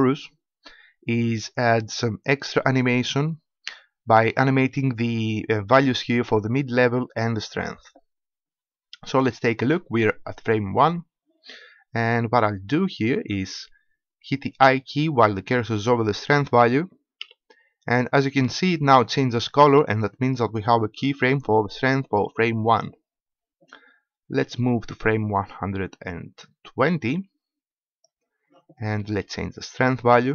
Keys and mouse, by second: 17.2 i, 24.9-26.7 drag, 30.2-30.3 drag.